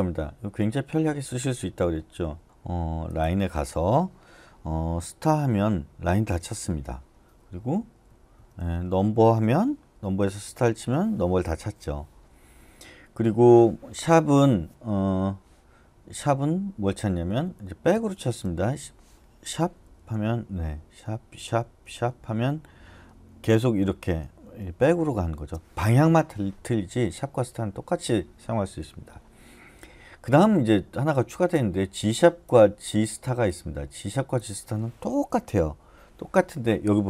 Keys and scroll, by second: 5.3 *, 7.8 Right, 8.1 Right, 8.3 Right, 8.6 Right, 8.8 Right, 10.4 *, 17.3 Left, 17.9 Right, 18.2 Right, 19.8 #, 20.8 #, 21.4 #, 21.8 #, 23.1-25.1 typing.